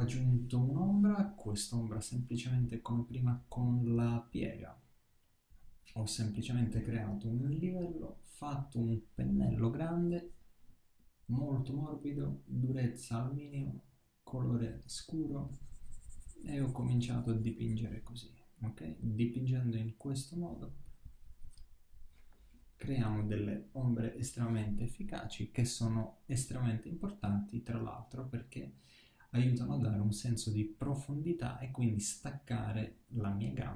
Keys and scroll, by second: 22.6 super+d, 23.6 super+-.